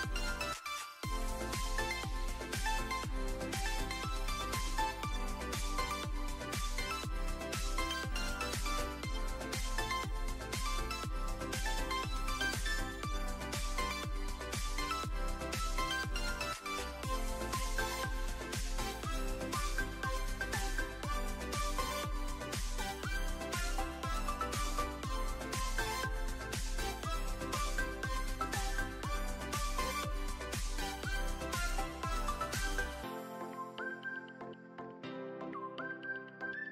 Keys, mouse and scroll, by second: 1.4 click, 2.5 click, 3.9 s, 4.4 drag, 4.8 click, 5.6 click, 5.7 click, 7.2 click, 8.4 s, 10.2 click, 11.2-12.5 drag, 13.5 click, 14.1 ctrl+s, 18.7 shift+d, 19.3 y, 20.1 click, 20.3 shift+middle drag, 20.9 click, 22.6 click, 26.0 click, 28.2 click, 30.0-30.4 alt+middle drag, 31.8 click, 32.8 click, 33.8 click, 36.1 click.